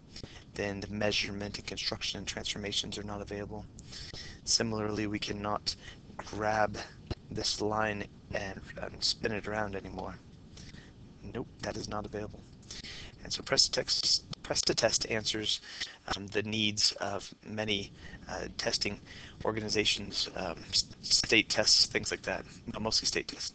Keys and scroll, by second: 6.7 Down, 6.7 Escape, 6.7 x.